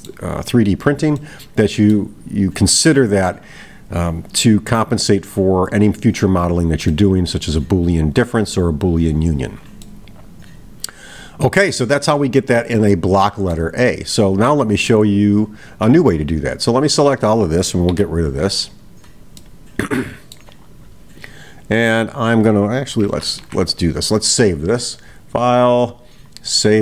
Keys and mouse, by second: 1.2-2.1 middle drag, 6.9-7.7 middle drag, 9.8-11.8 middle drag, 12.6-13.6 middle drag, 16.3-17.2 drag, 19.4-20.3 middle drag, 23.8 middle drag, 25.3-26.8 drag.